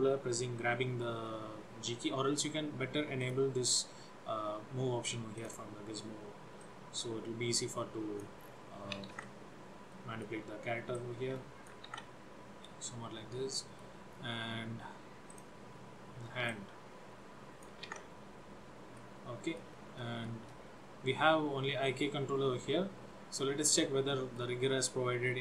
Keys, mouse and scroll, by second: 3.4 click, 6.7 click, 8.5-9.0 scroll down 4, 9.6 ctrl+z, 10.1 middle click, 11.0 click, 12.4 ctrl+z, 12.8 middle click, 14.2-14.8 scroll up 3, 15.4 click, 15.8-16.6 scroll up 1, 16.6 click, 18.4 ctrl+z, 19.1 middle click, 20.1 shift+middle click.